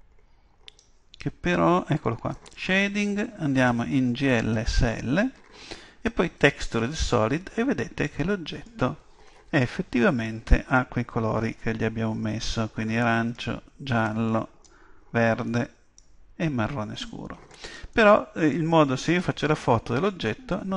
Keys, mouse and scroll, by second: 2.5-5.3 drag, 6.4-8.3 drag, 7.3-9.2 middle drag, 9.6-11.5 middle drag, 12.9-19.4 middle drag.